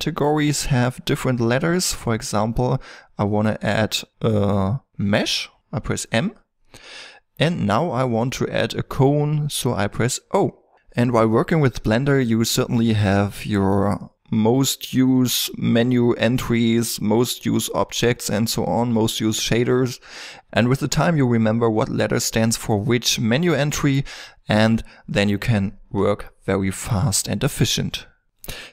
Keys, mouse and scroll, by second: 12.3 x, 13.4 click, 13.6 x, 26.1 middle drag, 26.4 click, 27.9 click.